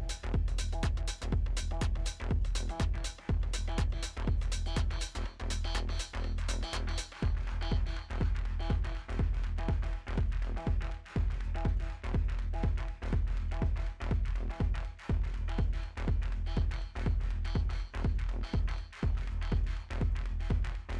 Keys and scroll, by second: 0.5 ctrl+g.